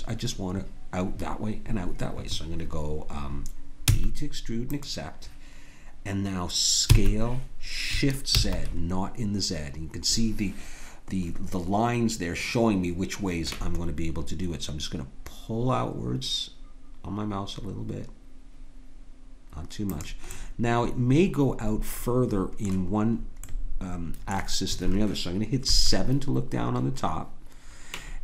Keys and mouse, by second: 3.9 e, 6.9 s, 20.3-21.8 middle drag, 25.6 KP_7.